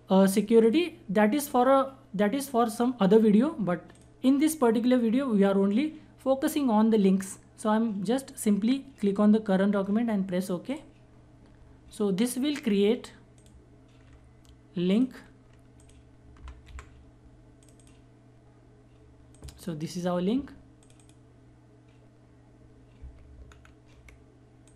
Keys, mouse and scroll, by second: 0.2 click, 3.5 click, 10.2 click, 10.3 click, 12.9 click, 15.7-16.7 typing, 17.2 click, 23.1 ctrl+scroll down 1, 24.2 click.